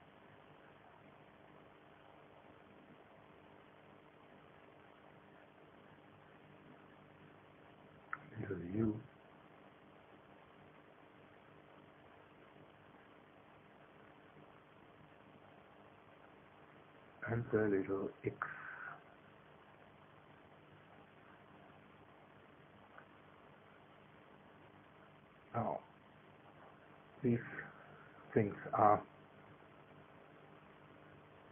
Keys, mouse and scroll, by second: 1.3 click, 2.6 click, 3.5 click, 4.5 click, 5.3 KP_0, 5.5 KP_Decimal, 5.7 KP_0, 5.9 KP_1, 6.1 KP_Enter, 7.7 space, 8.6 click, 9.7 click, 10.8 click, 11.5 KP_0, 11.8 KP_Enter, 11.8 KP_Decimal, 12.0 KP_0, 12.2 KP_1, 14.1 Delete, 14.2 Delete, 14.4 Delete, 15.2 KP_0, 15.5 KP_1, 15.8 KP_Enter, 18.0 space, 19.0 click, 21.4 click, 22.3 click, 23.3 KP_0, 23.5 KP_Decimal, 23.7 KP_0, 23.9 KP_1, 24.1 KP_Enter, 25.6 space, 27.5-28.5 middle drag.